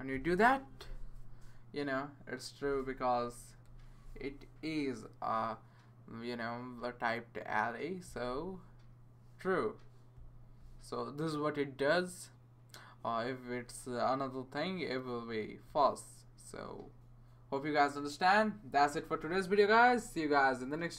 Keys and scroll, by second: 0.0-0.6 typing, 2.8-3.5 typing.